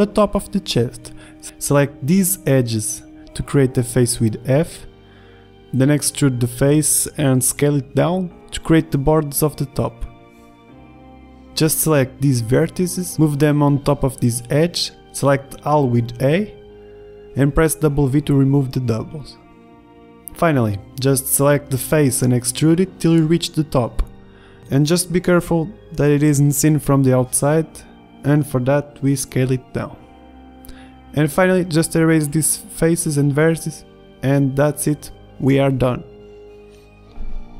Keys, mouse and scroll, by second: 1.1 a, 4.4 g, 5.0 f, 5.8 g, 7.3 e, 8.2 s, 11.0 ctrl+z, 11.3 ctrl+Tab, 13.5 ctrl+z, 14.2 g, 15.0 click, 15.9 a, 16.0 a, 16.3 w, 20.3 ctrl+z, 20.3 ctrl+Tab, 20.5 e, 23.7 s, 25.0 s, 28.2 ctrl+Tab, 29.2 right click, 30.4-31.7 middle drag, 32.2 right click, 32.5 Delete, 34.8 Delete, 35.3 Tab.